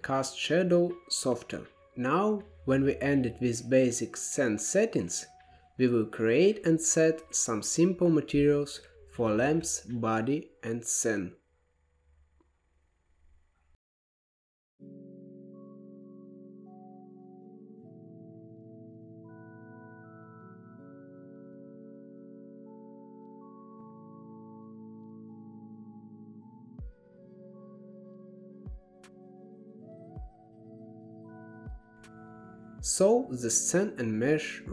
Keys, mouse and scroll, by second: 0.0-1.4 drag, 1.6 click, 3.0-9.2 drag, 9.7-10.2 shift+middle drag, 10.2-10.9 scroll up 13, 11.1 middle click, 11.4 scroll up 5, 12.3-14.3 drag, 15.4-15.8 drag, 18.8 KP_7, 19.9 click, 20.5 g, 21.6 KP_0, 23.1 click, 24.0-24.4 scroll down 4, 24.4-25.5 middle drag, 26.0-26.4 scroll up 6, 26.4 middle click, 26.9-28.0 drag, 29.3-31.0 middle drag, 31.0-32.3 drag, 32.6-33.5 scroll down 1, 33.5 click.